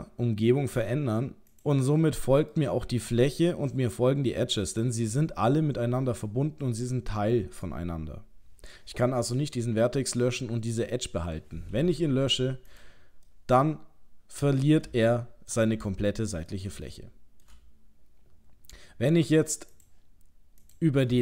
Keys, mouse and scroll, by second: 2.0 middle click, 3.2 middle click, 4.4-6.2 scroll down 1, 12.1 Delete, 13.3 middle click, 13.9 middle click, 15.1 shift+middle click, 15.2 shift+middle click, 15.9 ctrl+middle click, 16.9 shift+middle click, 19.7 click, 20.6 click.